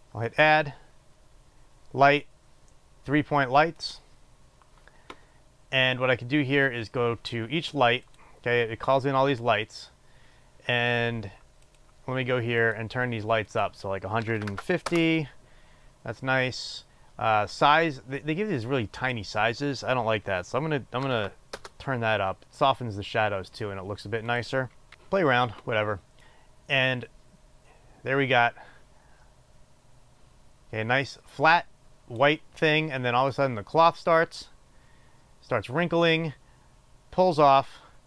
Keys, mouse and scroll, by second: 4.6-8.7 drag, 15.5-33.6 drag, 16.2 Return, 22.3 Return, 25.2 Return, 34.5-38.0 drag.